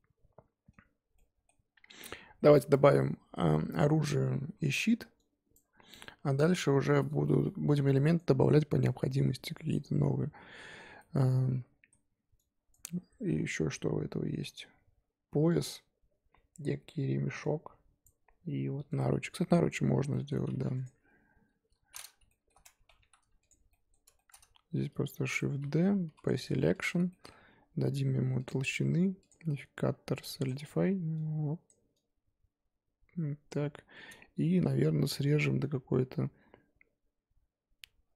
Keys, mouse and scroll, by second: 11.0-20.3 middle drag, 20.3-20.8 scroll up 1, 20.8 click, 21.4 KP_1, 22.3 shift+middle click, 22.6 scroll up 1, 22.7 Tab, 23.0 3, 23.5 alt+click, 23.7-25.2 middle drag, 25.2 shift+d, 25.5-26.2 scroll up 1, 26.2 p, 26.5 Tab, 26.7 click, 27.1-30.4 shift+middle drag, 30.4-34.4 drag, 34.4-38.0 shift+middle drag, 38.0 Tab.